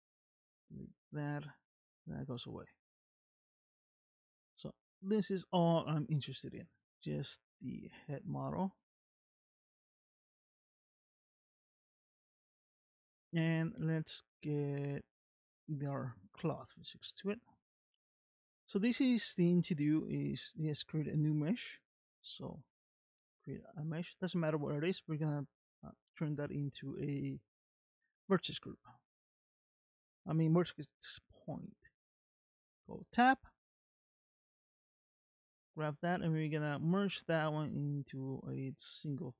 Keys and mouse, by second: 0.3 x, 2.4-3.6 middle drag, 3.9 shift+middle click, 5.9 middle click, 8.3 g, 11.7 shift+middle click, 12.7 middle click, 14.2 shift+middle click, 16.1 shift+middle click, 17.1 shift+middle click, 17.9 middle click, 19.4 shift+middle click, 20.3 middle click, 21.9 shift+a, 28.7 middle click, 31.9 Tab, 34.6 s, 36.1 s.